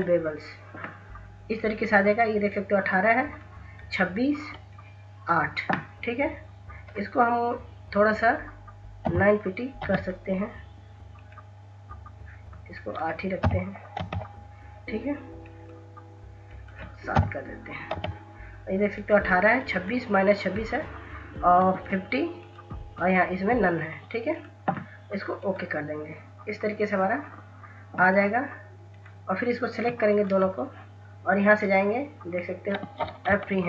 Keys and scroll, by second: 2.8 ctrl+s, 8.9 9, 9.7 Tab, 13.3 8, 13.9 8, 17.0 7, 17.8 Tab, 33.3 ctrl+s, 33.5 ctrl+s.